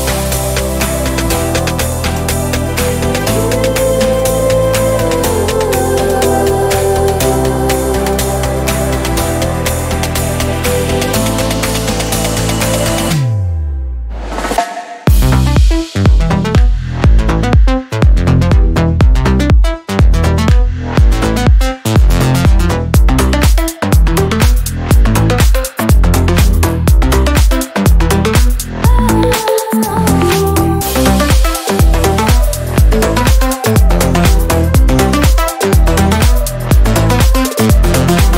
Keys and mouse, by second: 3.5-9.3 drag, 10.2 click, 11.1-16.6 middle drag, 16.6 ctrl+a, 20.9-22.7 drag, 24.4-26.3 middle drag, 26.3 click, 26.7 shift+d, 29.0 click, 29.6-38.3 drag.